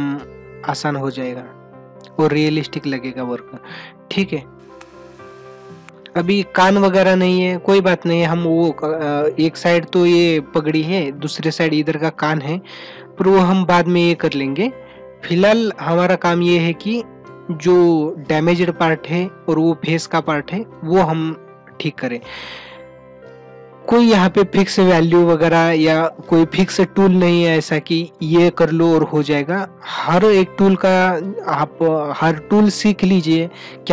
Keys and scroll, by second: 6.7 ctrl+alt+z, 8.4 ctrl+-.